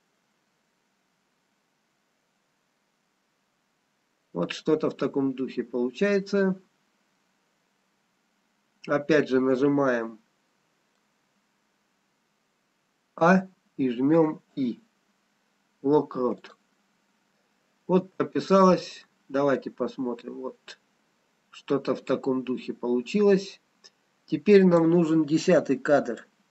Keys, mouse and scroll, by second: 13.7 a, 14.6 i, 18.9 click, 26.3 click.